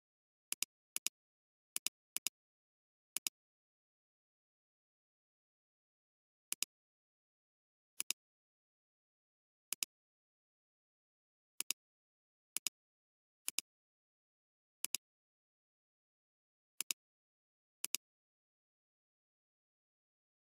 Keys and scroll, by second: 6.5 alt+space, 7.1 alt+space, 8.0 alt+space, 8.6 alt+space, 12.5 alt+space, 19.3 b.